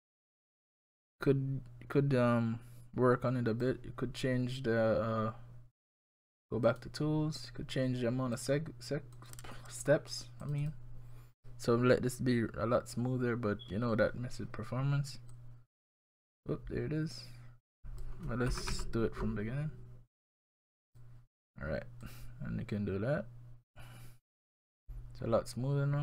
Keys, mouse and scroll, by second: 6.7 click, 8.4 click, 9.2 click, 9.7 click, 10.1 click, 10.4 click, 10.6 click, 15.3 click, 18.5 ctrl+z, 18.7 ctrl+z, 20.7 click, 20.9 click, 22.0 click.